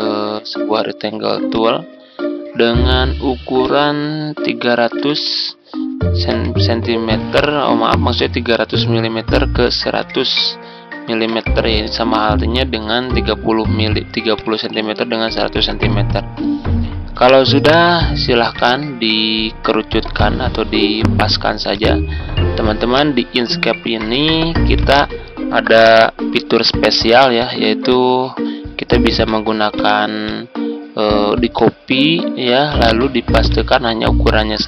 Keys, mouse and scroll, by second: 4.4-5.6 typing, 6.2 Tab, 8.7 click, 9.6-10.3 typing, 11.2 Return, 14.3 click, 16.7-17.5 ctrl+scroll down 1, 17.5-21.3 drag, 21.7 click, 22.2 ctrl+scroll up 1, 23.1 click, 24.2 z, 24.7 click.